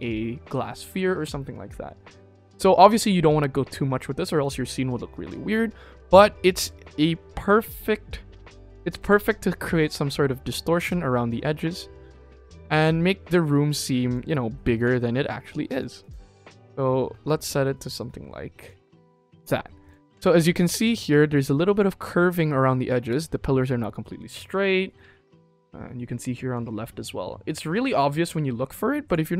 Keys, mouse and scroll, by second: 8.4 click, 14.7 click, 15.6 click, 15.9 click, 18.5 click, 19.8 click, 20.5 click, 20.8 ctrl+s, 29.0 click.